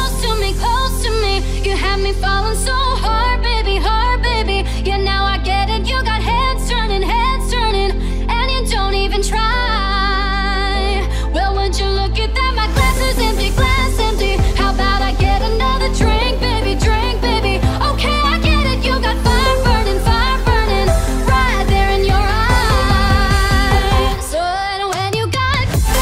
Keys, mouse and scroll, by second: 0.1 click, 1.0 alt+scroll down 1, 1.2 alt+shift+click, 2.4 ctrl+z, 3.0 alt+scroll up 1, 3.3 click, 4.7 ctrl+g, 5.2-7.2 alt+shift+drag, 7.2 alt+scroll up 1, 7.9 ctrl+scroll down 1, 8.4 scroll up 1, 8.9-9.3 ctrl+scroll down 2, 9.8 ctrl+scroll down 1, 10.4 click, 11.0 scroll up 1, 13.8 right click, 14.4-18.6 drag, 18.6-19.1 alt+scroll up 1, 19.2-20.2 scroll up 2, 21.0 click, 21.3-21.8 alt+scroll up 1, 22.3-23.2 alt+scroll down 1, 23.5 click.